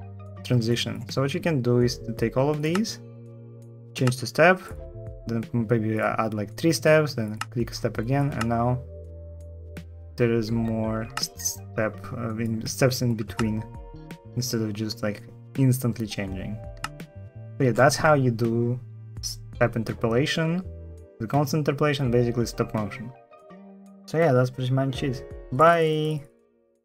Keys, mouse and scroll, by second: 8.1 space, 10.9 space, 13.1 space, 16.5 space.